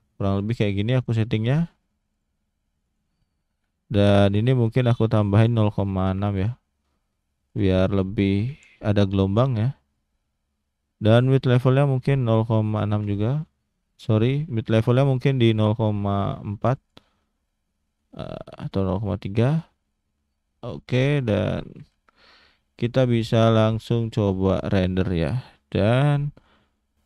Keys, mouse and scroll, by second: 2.1 click, 2.8 click, 4.2 click, 7.4 click, 11.1 click, 14.6 click, 18.5 click, 20.7 click, 22.6 click.